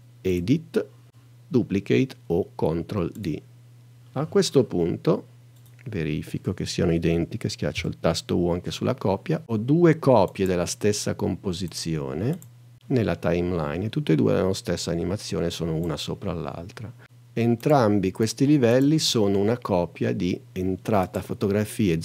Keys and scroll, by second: 7.8 u.